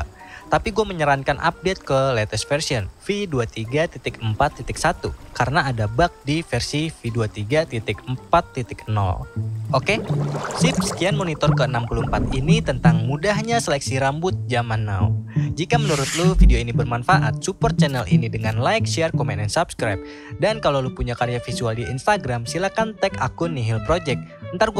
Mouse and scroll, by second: 12.0 click.